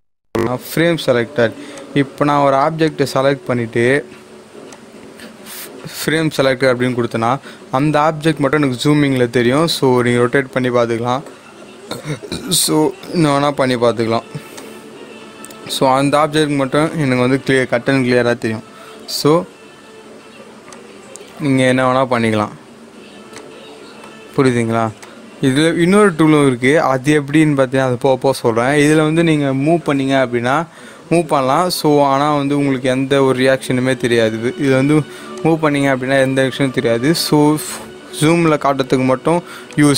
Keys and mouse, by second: 1.7 click, 9.5-18.5 drag, 18.5 g, 20.7 click, 23.3-28.8 drag, 28.8 click, 29.8 g, 35.4 click, 38.4 click.